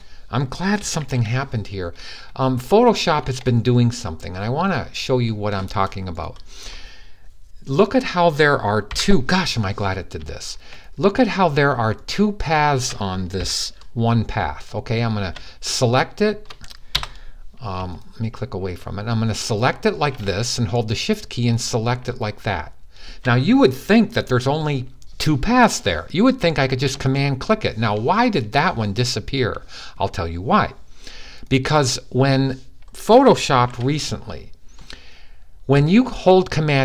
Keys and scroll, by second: 0.8 super+d, 8.7 p, 12.6-13.1 typing, 16.6 p, 22.9 p, 33.4 super+d.